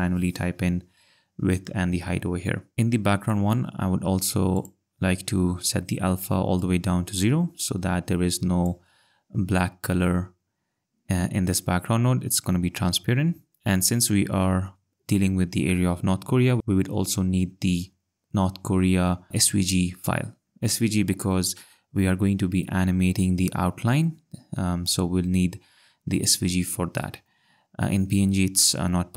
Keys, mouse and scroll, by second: 2.7 click, 3.2 click.